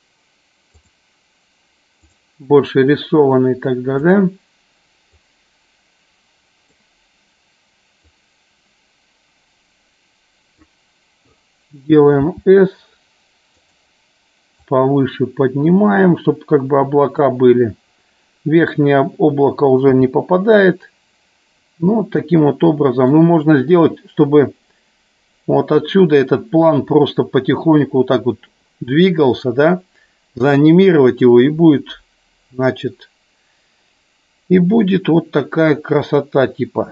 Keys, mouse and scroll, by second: 0.7 click, 1.9 click, 5.1-6.8 drag, 8.2-10.8 drag, 13.7 click, 14.7-17.2 drag, 19.8 KP_0, 23.2-36.9 drag.